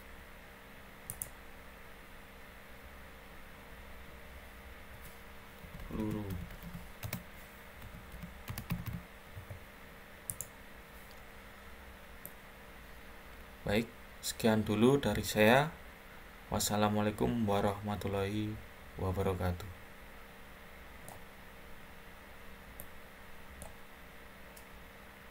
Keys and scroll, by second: 5.3-9.1 typing.